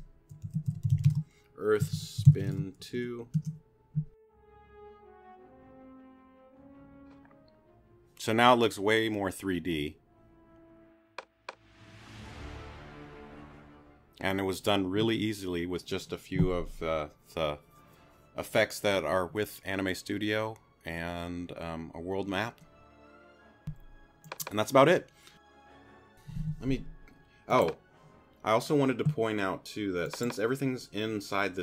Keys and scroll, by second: 0.2-2.8 typing, 3.4 Return.